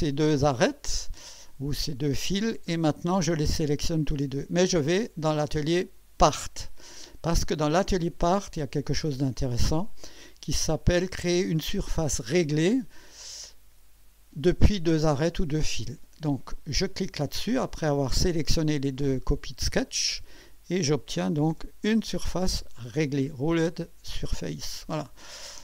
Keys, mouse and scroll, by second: 4.0 ctrl+click, 5.3 click, 6.2 click, 19.9 click, 23.0-23.3 scroll down 1.